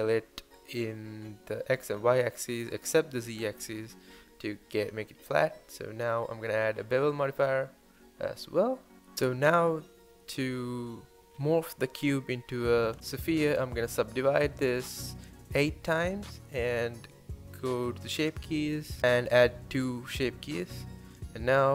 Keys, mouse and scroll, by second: 0.0 scroll down 1, 0.1 middle click, 0.4-1.6 scroll up 1, 1.6 scroll down 1, 1.9 click, 3.1 click, 3.3 scroll up 3, 3.6 middle click, 3.9 scroll up 1, 4.0-4.5 scroll down 2, 4.1 shift+middle click, 4.5-5.0 middle drag, 5.0 scroll up 1, 5.3-5.7 middle drag, 5.7 scroll up 1, 5.9 scroll down 4, 6.1 shift+middle click, 6.2 scroll up 1, 6.5 click, 6.7 middle click, 6.9 scroll down 1, 7.0 shift+middle drag, 7.3 scroll up 6, 7.5-8.1 shift+middle drag, 8.1 scroll down 2, 8.4-9.2 shift+middle drag, 10.2 scroll up 1, 10.4-10.8 shift+middle drag, 10.8 scroll up 1, 11.0 Tab, 11.2-12.2 middle drag, 12.2-13.7 right drag, 13.7-15.0 drag, 15.0 Tab, 17.3-18.9 drag, 18.9-19.5 shift+middle drag, 19.5 Tab, 20.1-21.7 scroll up 1.